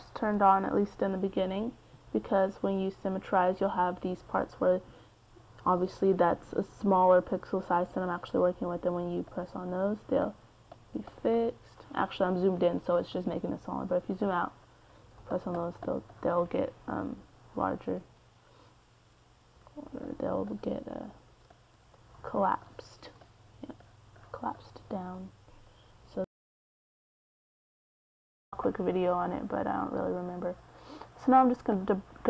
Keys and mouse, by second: 3.3-8.4 drag, 8.8 middle click, 9.6-13.1 drag, 13.1-14.7 middle drag, 14.7 f, 15.9-21.9 drag, 21.9-23.0 middle drag, 23.0-26.6 drag, 26.6 middle click, 26.9-30.0 drag, 31.4-32.2 drag.